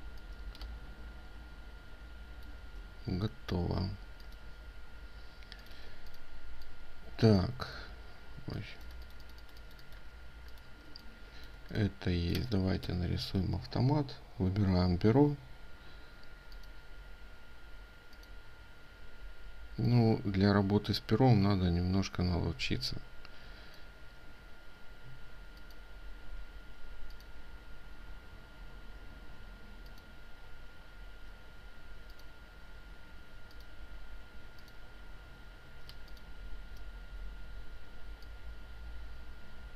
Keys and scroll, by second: 5.8 ctrl+space, 35.9 ctrl+space.